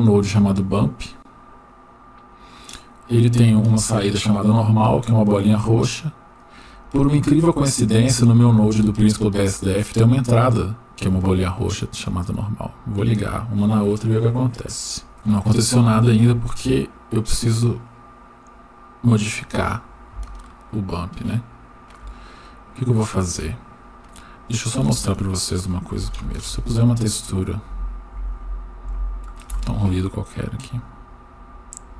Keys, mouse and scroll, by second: 0.6 scroll up 2, 1.7-2.3 drag, 4.1-5.5 drag, 6.3-12.1 drag, 16.1 click, 16.9-19.4 drag, 20.4-22.0 shift+middle drag, 21.8 shift+scroll up 1, 22.3 scroll down 1, 24.8 shift+a, 28.3 Down, 31.7-31.9 drag.